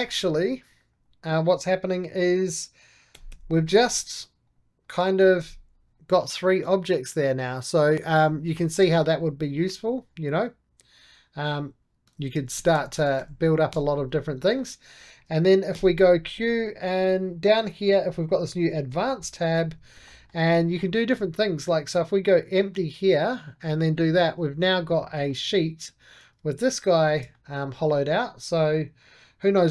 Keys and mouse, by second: 1.9-3.0 drag, 3.0 g, 3.6-5.1 drag, 5.1 g, 5.6 click, 5.8-8.3 right drag, 8.5 middle click, 9.1 2, 9.5-12.0 drag, 12.0 ctrl+z, 12.8 ctrl+z, 13.6 ctrl+z, 14.3-15.6 middle drag, 15.6 q, 16.0 click, 16.3-18.2 middle drag, 18.2 click, 18.8-22.1 shift+middle drag, 22.1 click, 22.6 middle click, 23.4 click, 23.5 right click, 24.0-25.7 shift+middle drag, 25.7 2, 26.9 alt+shift+click, 27.2-29.7 middle drag.